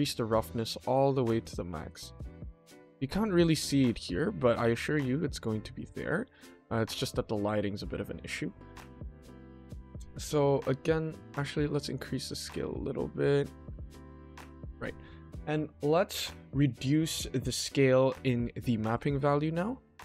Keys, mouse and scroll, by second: 1.2 middle click, 1.5-2.0 scroll up 1, 2.8 scroll up 1, 3.4-4.0 middle drag, 4.2-4.6 middle drag, 5.1 scroll down 1, 5.7 scroll down 1, 5.9-6.3 middle drag, 6.4-7.8 scroll down 1, 7.8-8.5 scroll up 1, 11.0 click, 11.2 click, 11.4 click, 11.8 click, 12.1 click, 13.7-14.6 scroll up 1, 15.2-15.6 middle drag, 15.7 middle click, 16.8 middle click.